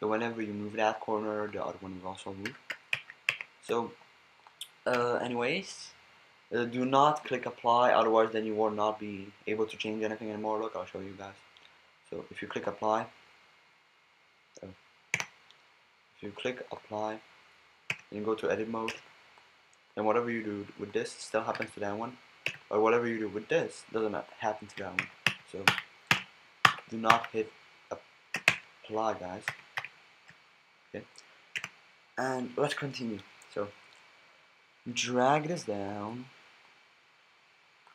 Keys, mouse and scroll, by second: 1.1-2.5 drag, 2.5 a, 3.0 ctrl+z, 3.3 ctrl+z, 5.0 a, 12.6-15.2 drag, 15.2 Tab, 16.2-18.9 drag, 17.9 Tab, 18.9 b, 19.9-21.5 drag, 21.5 a, 22.5 b, 23.3-24.3 drag, 25.0 ctrl+z, 25.2 ctrl+z, 25.7 ctrl+z, 26.1 ctrl+z, 26.6 ctrl+z, 27.1 ctrl+z, 28.5 Tab, 29.5 ctrl+z, 29.8 ctrl+z, 31.6 Tab, 34.9 b, 36.6-37.9 drag.